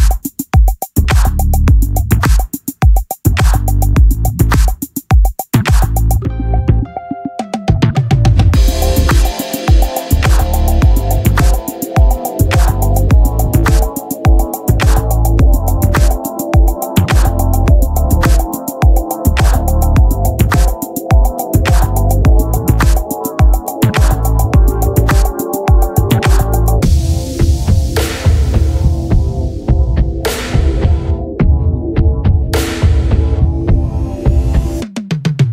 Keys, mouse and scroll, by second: 0.0 c, 0.4 click, 2.5 c, 3.1 c, 5.3-6.7 drag, 6.7-7.9 right drag, 6.8 c, 7.7-11.1 drag, 8.1-9.3 right drag, 8.2 c, 11.7 c, 12.8 click, 13.2 Tab, 13.4 z, 16.5-18.1 middle drag, 18.1 click, 18.5 Tab, 18.8-20.6 drag, 19.9 e, 20.7 click, 20.7 z, 21.0 KP_3, 23.0 Tab, 23.5 z, 26.0 right click, 26.1 Tab, 26.9 ctrl+Tab, 28.4 z, 29.3 e, 30.2 z, 31.9-33.1 drag, 33.1 Tab, 34.2-35.5 right drag.